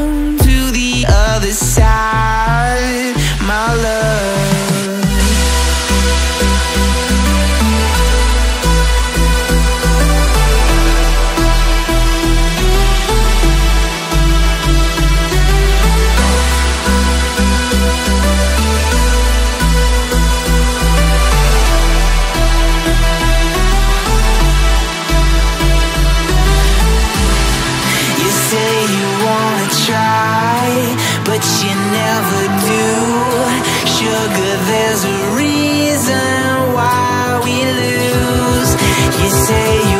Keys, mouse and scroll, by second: 1.2 alt+scroll down 1, 1.4 alt+scroll up 1, 1.5-2.1 scroll down 1, 3.7 alt+scroll down 1, 3.8 alt+scroll up 1, 5.5-6.2 scroll up 1, 6.4 ctrl+z, 6.9 right click, 9.2 right click, 21.2 right click, 23.5 double click, 25.8 alt+scroll up 1, 26.0 ctrl+t, 27.4 ctrl+t, 27.6 shift+click, 28.4 ctrl+z, 28.5 ctrl+z, 28.6 ctrl+z, 28.7 ctrl+z, 29.2 ctrl+j, 29.4 ctrl+t, 29.9 ctrl+j, 30.0 ctrl+t, 30.7 ctrl+t, 30.8 ctrl+click, 30.9 ctrl+right click, 31.6 alt+scroll down 1, 31.7 alt+scroll up 1, 34.1 right click, 38.1-38.7 Up.